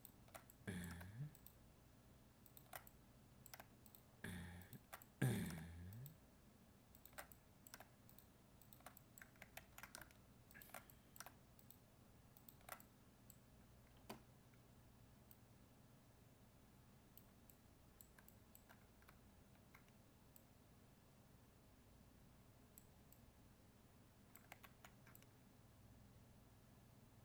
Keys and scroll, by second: 9.5 ctrl+z, 24.6 ctrl+z.